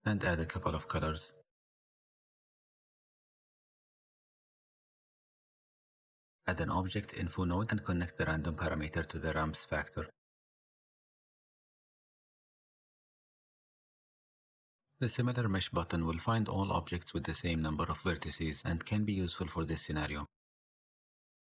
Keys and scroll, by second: 6.0 shift+a, 15.1 shift+a.